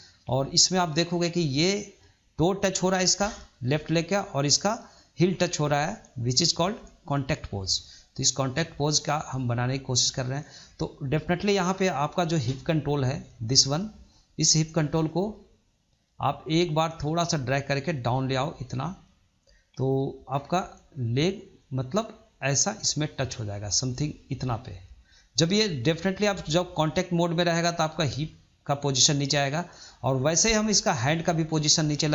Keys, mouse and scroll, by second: 13.1 click, 16.8 click, 27.2-29.3 scroll down 2, 29.3-29.8 scroll up 2, 29.8-30.6 middle drag, 30.6 scroll up 2, 30.8-31.8 shift+middle drag, 31.8-32.1 scroll down 1.